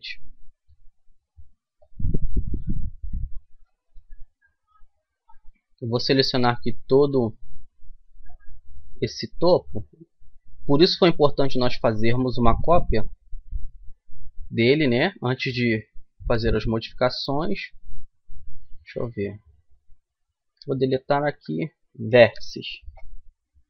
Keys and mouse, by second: 3.6 right click, 3.9 middle click, 6.3-7.6 drag, 7.6 middle click, 8.6 c, 17.2 right click, 17.5-18.8 middle drag, 20.3 Delete, 21.2 Up.